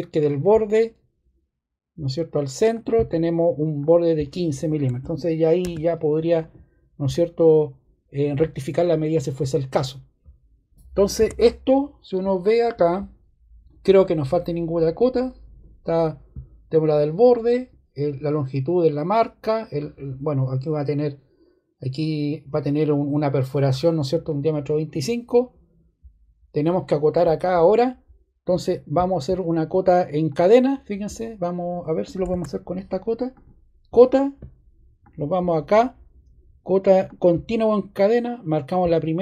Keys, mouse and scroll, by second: 5.6 ⟲, 32.2 Escape.